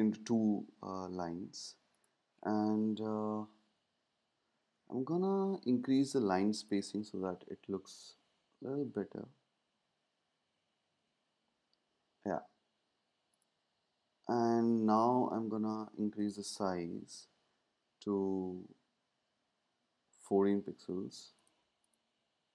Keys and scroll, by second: 3.1 shift+Down, 3.7 shift+Up, 8.6 shift+Down, 9.2 shift+Down, 9.9 shift+Down, 10.7 shift+Up, 17.0 Up, 17.1 Up, 19.9 Down.